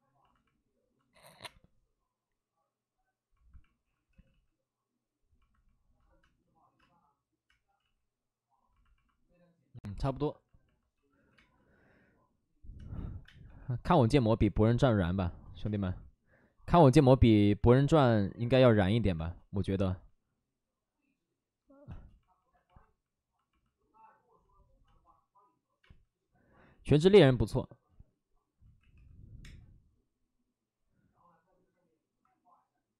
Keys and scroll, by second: 1.1 ctrl+z, 1.2 ctrl+z, 1.4 space, 4.0 ctrl+z, 4.2 ctrl+z, 6.1 space, 7.4 space, 7.7 ctrl+z, 10.9 ctrl+z, 11.3 ctrl+z, 11.3 space, 13.0 1, 13.2 space, 13.4 1, 15.6 space, 19.1 space, 21.9 space, 25.8 space, 26.6 ctrl+z, 27.9 ctrl+z, 28.6 ctrl+z, 28.9 2.